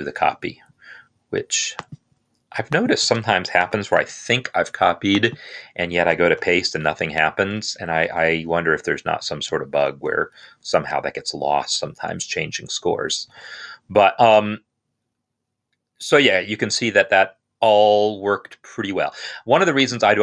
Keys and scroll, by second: 3.5 ctrl+c, 6.2 ctrl+v.